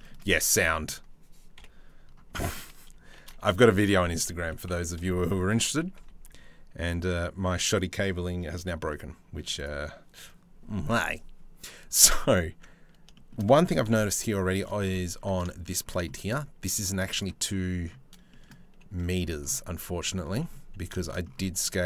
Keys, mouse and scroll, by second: 0.3 shift+middle click, 1.1 KP_7, 2.8 shift+d, 3.3 s, 5.4 g, 8.2 shift+middle click, 8.5 middle click, 9.2-11.8 drag, 12.7 shift+middle click, 13.4 KP_7, 14.0 shift+middle click, 14.8 Tab, 15.1 shift+middle click, 15.7 shift+middle click, 16.4 z.